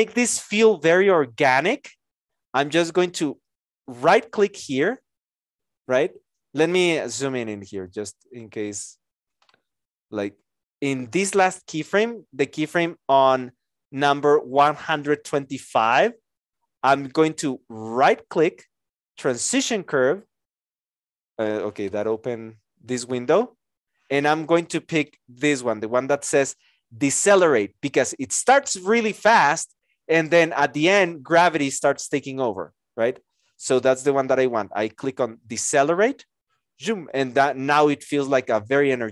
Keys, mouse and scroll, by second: 7.8 Escape.